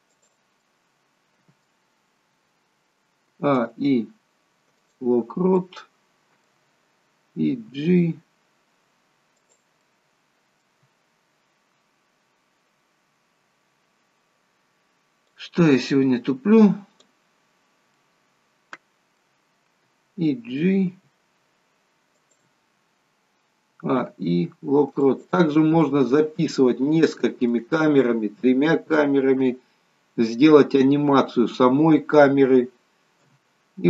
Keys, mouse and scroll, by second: 0.7 middle click, 3.4 a, 3.6 i, 5.6 middle click, 7.8 g, 9.9 middle click, 15.5 click, 18.1 middle click, 21.1 g, 23.9 a, 25.9 middle click, 29.5 KP_0, 33.3 KP_0.